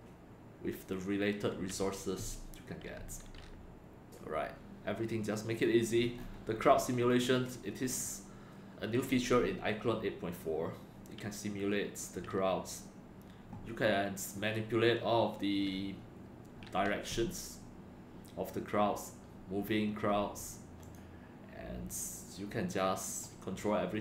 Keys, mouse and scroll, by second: 5.5 click, 7.1 click, 20.8 click, 23.0 click.